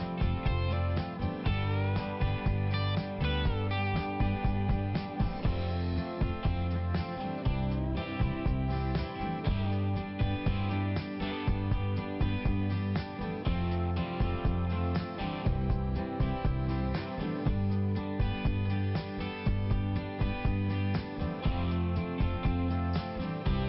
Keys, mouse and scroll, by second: 2.1 click, 3.1 click, 8.1 click, 8.6 right click, 9.3 click, 11.0 click, 11.7 click, 12.1 click, 12.2 double click, 13.2 click, 13.8 click, 14.6 double click, 15.7 right click, 16.6 click, 17.3 click, 19.4 click, 20.7 click, 22.1 click.